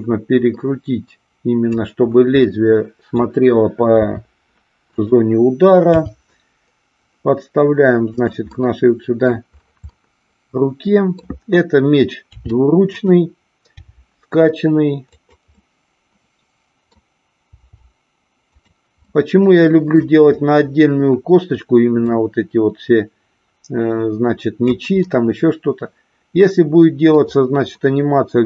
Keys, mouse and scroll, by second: 2.5 middle click, 4.0 r, 5.0 click, 5.9 g, 8.2 click, 8.5 middle click, 9.9-11.3 middle drag, 12.3 r, 13.0 click, 13.7 g, 15.1 click, 15.6-17.0 middle drag, 17.5 g, 18.5 click, 19.1 middle click, 22.1-24.7 drag, 25.0-27.1 middle drag.